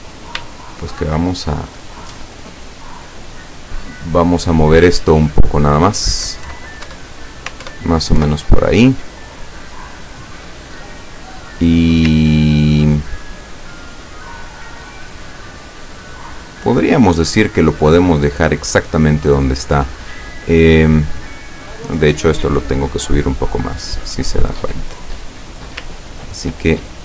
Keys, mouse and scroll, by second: 0.5 shift+click, 6.5 Left, 6.9 Up, 7.7 alt+Up, 8.2 alt+Left, 9.9-10.6 scroll down 2, 11.3 click, 12.6-13.3 ctrl+scroll down 6, 21.8-24.6 drag, 25.9-27.0 ctrl+drag.